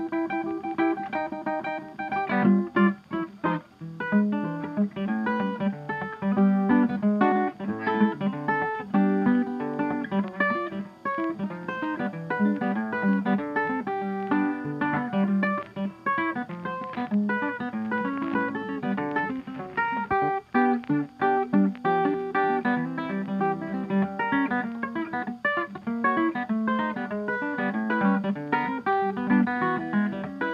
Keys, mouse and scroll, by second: 0.6 click, 3.3 scroll up 1, 4.2 scroll up 1, 4.4 click, 5.0 right click, 6.5 click, 7.7 n, 9.4 scroll, 11.3 s, 12.3 click, 15.5 click, 16.7 click, 16.9 Escape, 17.2-17.6 scroll, 18.5 click, 19.3 click, 20.6 click, 21.3 scroll down 3, 22.2 scroll, 22.8 ctrl+Escape, 26.3 click, 28.9 click.